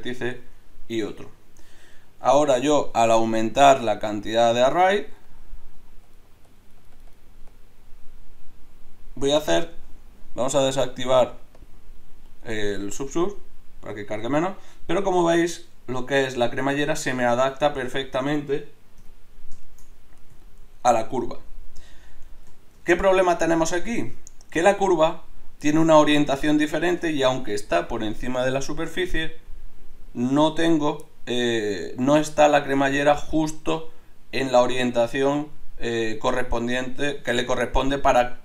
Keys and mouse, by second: 1.1 Tab, 19.0 KP_Divide, 29.4 middle click, 29.6 middle click, 29.8 middle click, 31.2 middle click.